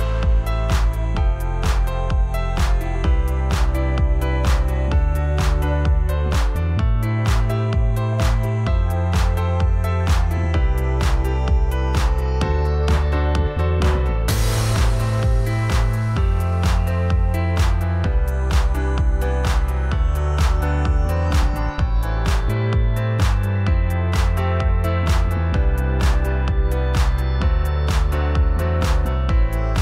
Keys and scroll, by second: 0.0 ctrl+t, 5.4 a, 15.3 ctrl+shift+], 27.4 ctrl+t.